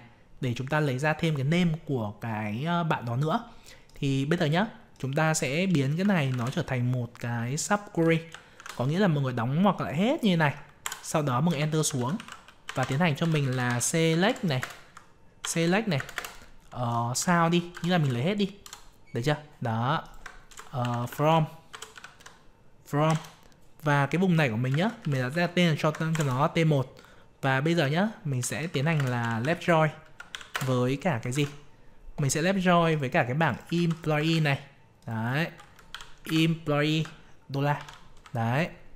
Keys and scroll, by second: 31.3 alt+Tab, 33.7 ctrl+c, 34.2 alt+Tab, 36.2 ctrl+v.